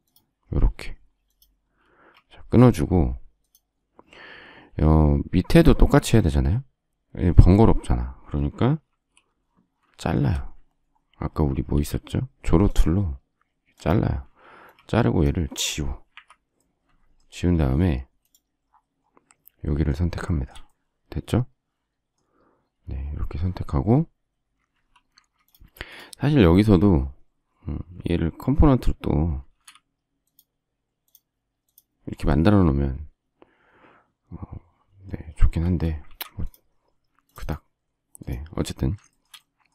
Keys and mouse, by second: 1.9 space, 8.8 alt+f, 11.7 alt+x, 14.4 space, 14.7 click, 16.1 Delete, 25.0 Escape, 29.5 shift+x, 36.0 ctrl+z.